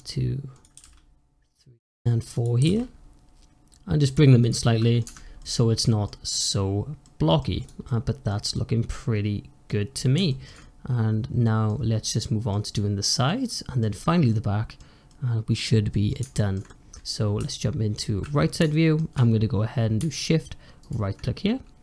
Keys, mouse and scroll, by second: 0.4 click, 0.6 g, 2.2 click, 2.4 g, 4.3 click, 4.5 middle click, 4.9 Tab, 5.2-7.5 middle drag, 7.5 click, 7.7-8.2 middle drag, 8.2 scroll down 1, 8.4-9.7 middle drag, 9.7-10.2 scroll up 3, 10.2-11.6 shift+middle drag, 11.6 scroll down 2, 11.9-13.7 middle drag, 13.7-14.2 scroll up 1, 14.2-16.9 middle drag, 16.9-17.2 scroll up 1, 17.2 `, 18.6-19.6 shift+middle drag, 19.6-20.7 scroll up 1, 20.7 shift+right click, 21.6 scroll down 1, 21.7-21.8 scroll up 1.